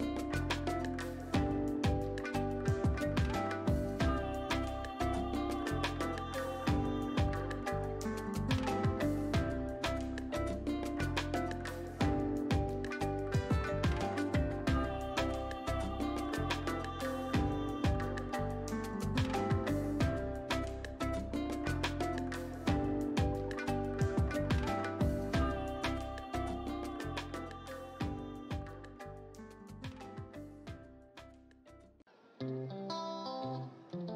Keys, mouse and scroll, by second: 3.4-8.8 alt+drag, 8.7 right click, 10.0 click, 14.5 right click, 16.2-27.4 drag, 27.4 typing, 27.8 Return, 30.2 click, 31.0 Up, 33.4 Return.